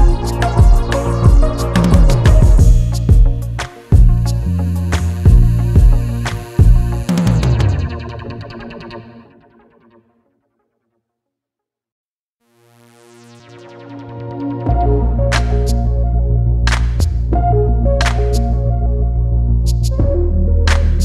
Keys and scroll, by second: 12.8 ctrl+z, 14.2 ctrl+z.